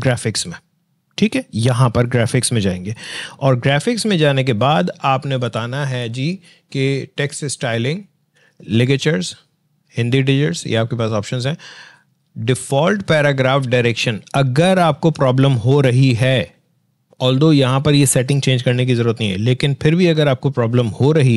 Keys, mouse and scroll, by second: 3.5 click, 5.4 click.